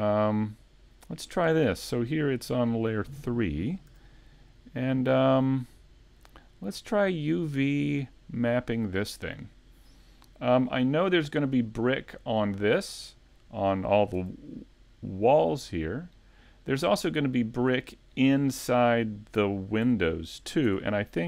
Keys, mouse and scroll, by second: 0.0 scroll up 1, 0.7 middle click, 1.1 right click, 3.1 click, 3.9 a, 4.4 middle click, 6.2 scroll down 2, 6.6 middle click, 11.8-12.2 scroll up 1, 12.2 right click, 14.2 Tab, 16.3 middle click, 21.1 right click.